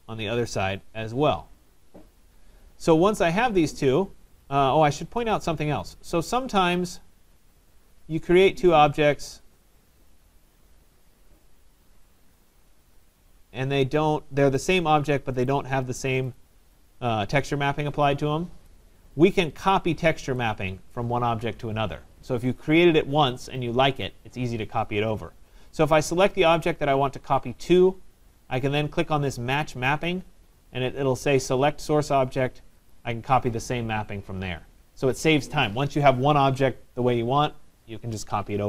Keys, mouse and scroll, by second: 2.8 right click, 4.6 click, 4.7 click, 5.3 click, 5.3 click, 8.0 click, 8.8 click, 10.1 click, 11.4 click, 12.5 click, 13.1 click, 13.5 scroll, 13.7 middle click, 14.6 right click, 15.5 click, 16.4 click, 18.7 right click, 18.7 click, 19.4 click, 19.4 right click, 20.0 middle click, 20.1 middle click, 21.0 right click, 26.0 right click, 26.2 click, 30.1 click, 32.9 click, 33.1 click.